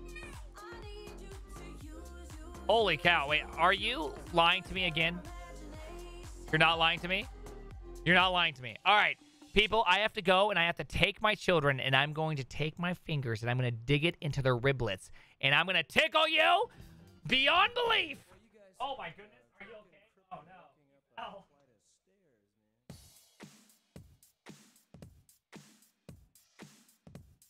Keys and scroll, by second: 1.1 typing, 2.1-9.4 typing.